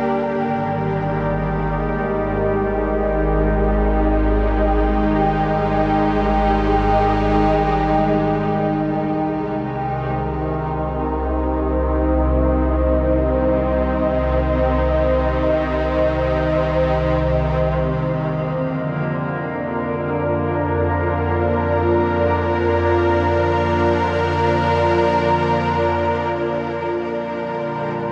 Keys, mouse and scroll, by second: 0.5 right click, 1.2 click, 2.6 click, 12.6 ctrl+z, 13.8-17.6 alt+shift+drag, 18.5 scroll up 1, 18.7-20.5 typing, 19.1 click, 19.4 click, 19.8 click, 20.3 click, 20.6 click, 21.5 typing, 22.4 click, 23.0 z, 23.2 click, 23.3 space, 23.4 click, 23.7 z, 23.8 click, 24.0 space, 24.1-27.2 drag.